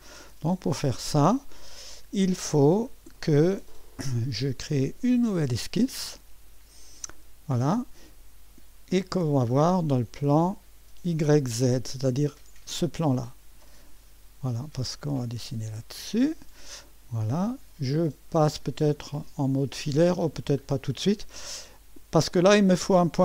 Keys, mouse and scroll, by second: 0.0 right click, 0.9-2.4 drag, 7.1 click, 9.3-12.3 right drag, 12.3 click, 15.1 click, 16.6-17.4 scroll up 1, 17.2 right click, 17.4 click, 17.8 right click, 18.3-19.3 scroll up 2.